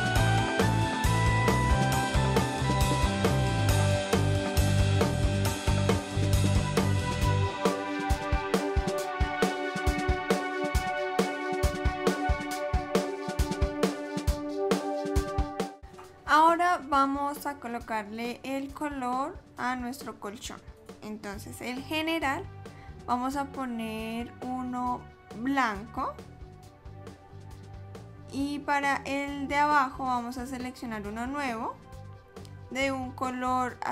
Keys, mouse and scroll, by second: 2.7 n, 3.1 click, 4.0 click, 4.6 click, 5.1 middle click, 5.3 scroll down 1, 5.4 scroll up 1, 5.6 shift+middle click, 6.0 click, 6.5 alt+click, 6.9 a, 7.2 ctrl+b, 8.6 click, 8.8 l, 9.0 shift+d, 9.9 s, 10.6 s, 11.2 click, 11.9 s, 12.5 click, 14.8 l, 14.9 click, 15.3 click, 20.9 click, 23.9 click, 29.6 click, 31.4 click.